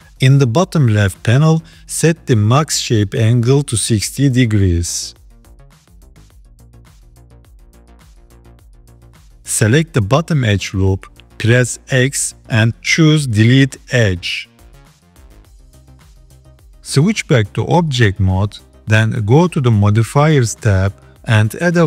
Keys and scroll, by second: 11.9 x, 17.5 Tab.